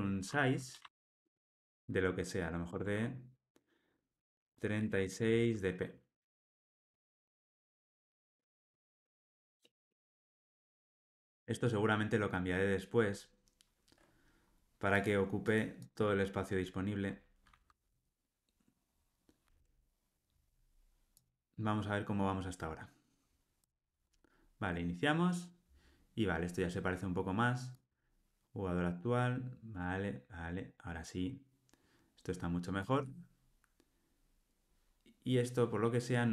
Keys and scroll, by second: 2.7 Return, 8.7 alt+super+l, 9.1 ctrl+alt+o, 19.4 ctrl+r.